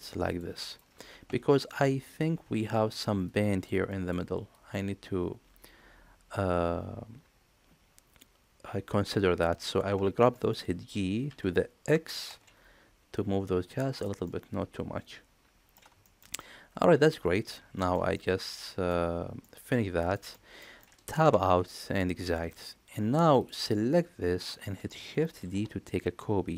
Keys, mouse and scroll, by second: 10.3 middle click, 11.3 g, 14.3-15.8 middle drag, 16.0 shift+middle click, 16.4 middle click, 17.8 shift+middle click, 18.1 middle click, 19.4 middle click, 20.2 shift+middle click, 20.6 middle click, 21.2 Tab, 21.7-22.9 middle drag, 23.4 click, 25.4 shift+d.